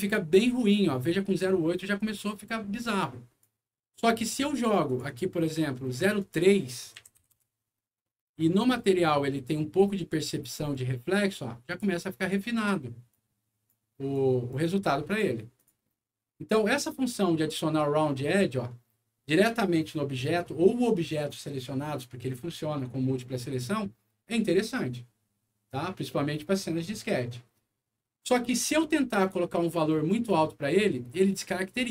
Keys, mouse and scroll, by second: 2.8 click, 4.8 click, 5.0 click, 6.1 click, 6.3 click, 7.2 KP_3, 7.4 Return, 8.0 middle click, 8.7 click, 10.7-11.8 drag, 12.2 click, 13.1 click, 14.1 click, 15.0 click, 15.5 click, 18.5 scroll up 2, 19.9 scroll down 2, 30.0 click.